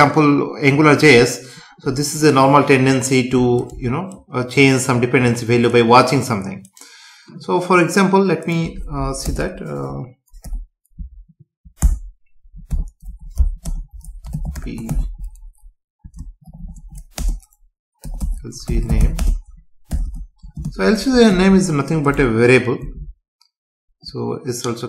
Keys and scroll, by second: 9.3 Return, 11.8 Tab, 12.7 Num_Lock, 13.6 BackSpace, 17.2 space, 19.2 space, 21.3 ctrl+s, 22.8 F5.